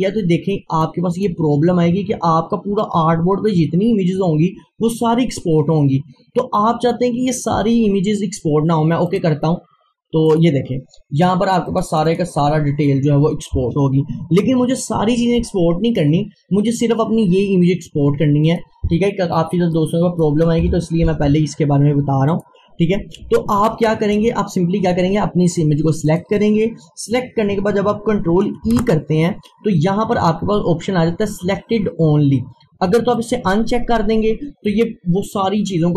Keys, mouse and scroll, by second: 0.8 click, 1.2-3.8 drag, 9.1 click, 18.5 click, 20.7 Delete, 22.3 click, 23.4 scroll down 1, 23.9 click, 33.2 click.